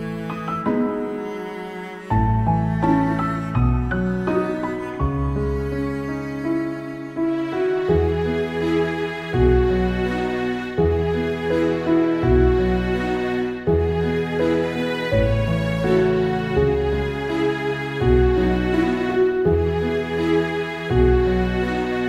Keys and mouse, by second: 2.3 ctrl+z, 2.4 ctrl+z, 9.1 ctrl+z, 9.3 ctrl+z, 9.7 ctrl+z, 10.4 ctrl+z, 10.9 ctrl+z, 11.2 ctrl+z, 11.4 ctrl+z, 11.7 ctrl+z, 11.9 ctrl+z, 18.4 ctrl+z, 18.6 ctrl+z.